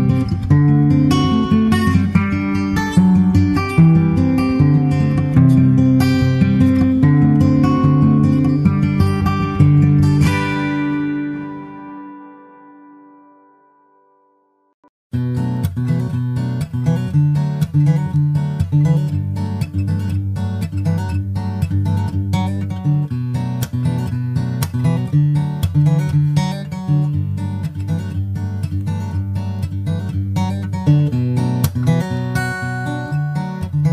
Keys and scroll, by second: 2.0 shift+super+Left, 5.2 shift+super+Right, 5.7 super+s, 6.2 super+Tab, 7.2 super+Tab, 7.5 super+Tab, 8.5 super+Tab, 12.8 super+Left, 14.1 super+Right, 17.1 super+Right, 17.5 super+s, 17.7 super+Tab, 18.6 super+Tab, 28.0 super+s, 28.3 super+Tab, 30.4 super+Tab.